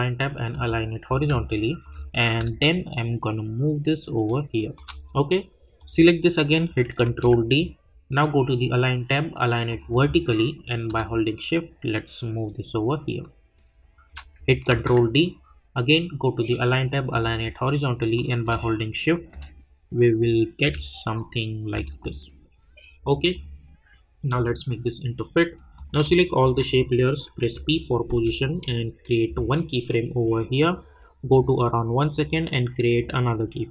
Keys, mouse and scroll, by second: 0.5 click, 1.3 space, 1.4 click, 1.8 space, 2.3 click, 7.1 ctrl+d, 9.7-14.8 drag, 19.6-20.6 scroll down 1, 20.6 click, 26.4 shift+click, 27.4 p, 29.2-33.7 drag.